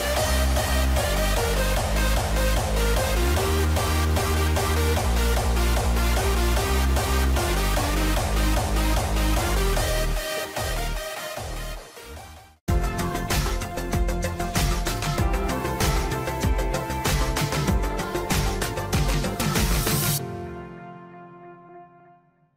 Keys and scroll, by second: 5.4 ctrl+s, 9.6 ctrl+-, 10.3 ctrl+=, 10.7 ctrl+0.